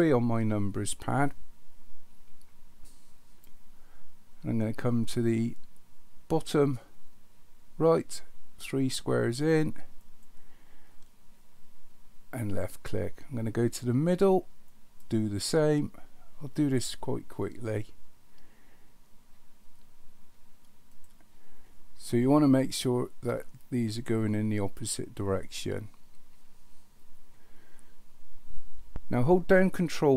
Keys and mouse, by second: 10.0 click, 14.7 click, 20.9 click.